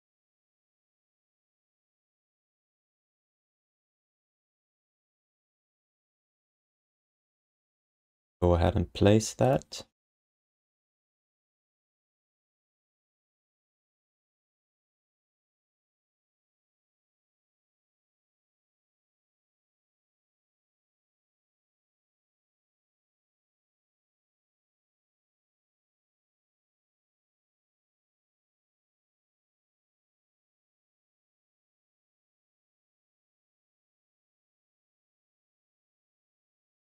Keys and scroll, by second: 2.0 ctrl+s, 3.6 alt+q, 4.0 alt+q, 8.5 shift+h, 13.8 space, 16.9 space, 17.5 space, 17.8 f.